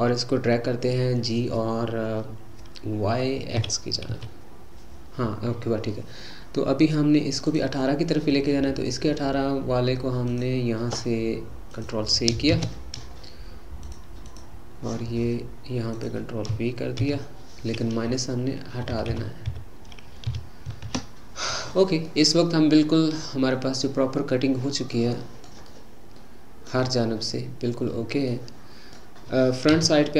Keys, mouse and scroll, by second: 3.5 g, 10.3 click, 11.7-13.9 drag, 14.3 click, 15.9-19.0 drag, 19.1 Left, 22.0-23.4 middle drag, 23.4-23.9 scroll up 2, 23.9-29.7 middle drag, 29.7 KP_1.